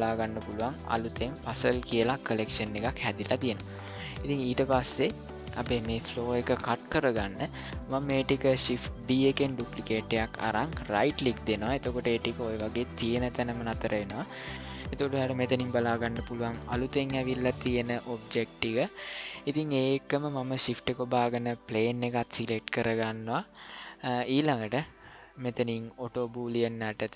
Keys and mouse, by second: 4.9 middle click, 9.1 shift+d.